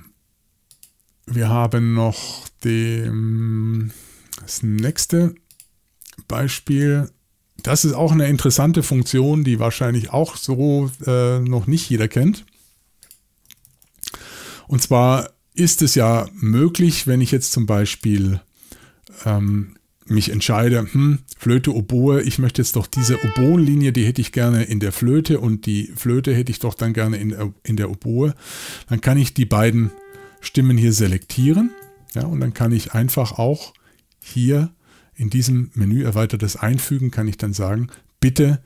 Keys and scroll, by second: 13.5-14.1 typing, 16.0 typing, 20.2 y.